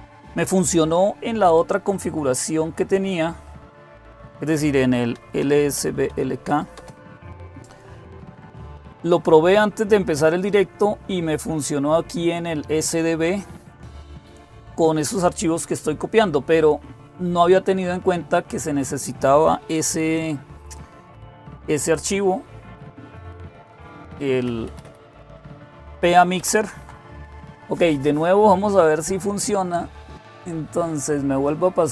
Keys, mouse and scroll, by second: 4.7-6.4 typing, 6.5 Return, 9.9-13.5 drag, 13.8-24.4 drag, 24.4 Up, 24.6 Up, 26.2 Down, 26.3 Down, 26.6 Down, 31.6 click.